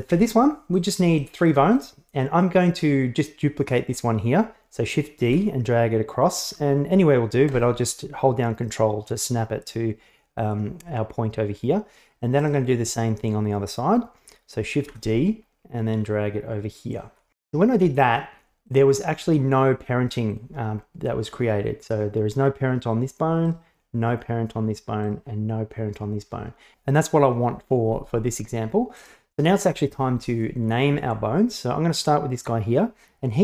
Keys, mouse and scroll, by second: 0.2 Tab, 1.2 shift+drag, 1.8 right click, 5.3 shift+d, 12.5 right click, 14.9 shift+d, 20.4 click, 23.5 right click, 25.1 right click, 29.0 right click.